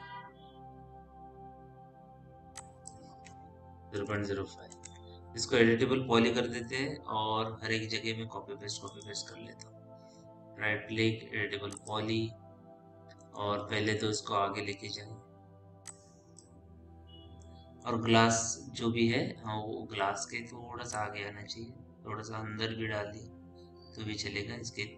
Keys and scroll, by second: 3.8 ., 4.3 KP_0, 4.3 5, 4.6 Return, 14.2 t.